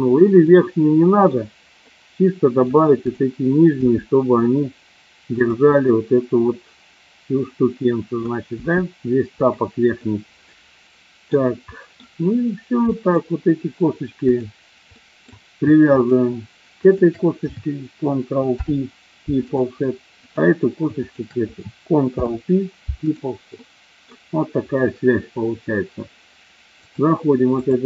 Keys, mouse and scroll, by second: 0.5 middle click, 1.9 scroll up 1, 2.0 middle click, 3.7 g, 5.3 click, 5.7-8.1 middle drag, 8.5 g, 9.3 click, 10.1-11.3 middle drag, 11.6 scroll up 1, 11.7 middle click, 12.9 middle click, 14.2 click, 14.9 middle click, 16.0 shift+click, 18.5 ctrl+p, 20.3 click, 22.1 ctrl+p, 23.6 middle click, 26.7 click.